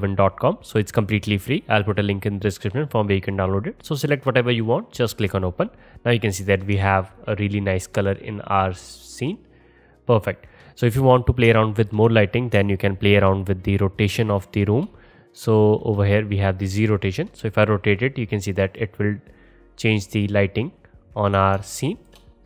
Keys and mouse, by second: 4.8-5.4 drag, 5.4-14.0 drag, 16.4 click.